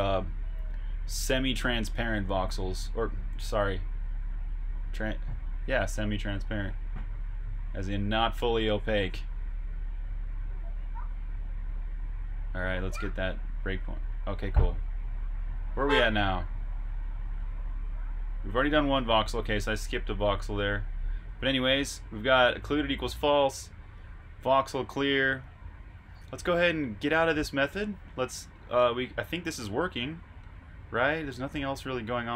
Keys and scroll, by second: 0.4 super+Tab.